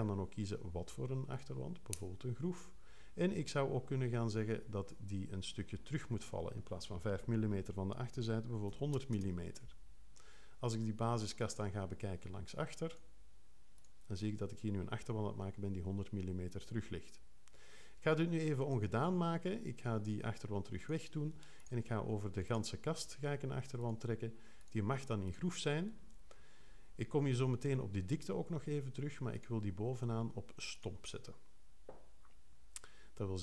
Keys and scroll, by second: 8.6 1, 8.9 0.